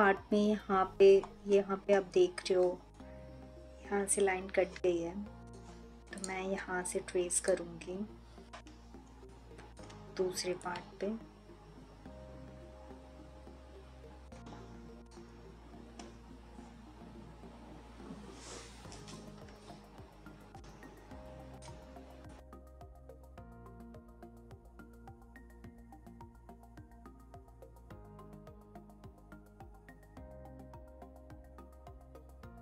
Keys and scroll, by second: 23.3 ctrl+z, 26.3 3, 27.2 ctrl+z, 31.6 3.